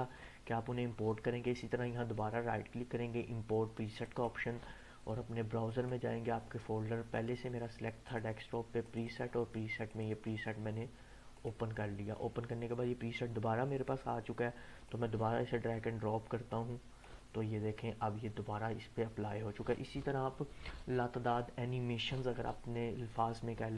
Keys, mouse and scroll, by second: 1.4 right click, 4.0 click, 8.1 click, 14.9-16.9 drag, 18.1-20.0 drag.